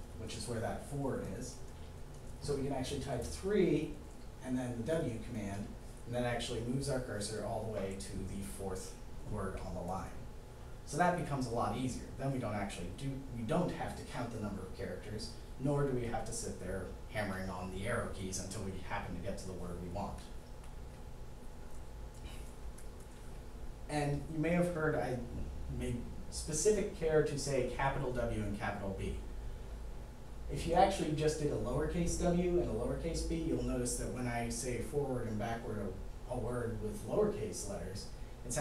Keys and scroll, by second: 3.0 3, 4.7 w, 31.0 w, 32.5 w, 34.2 w, 35.7 b, 37.2 b.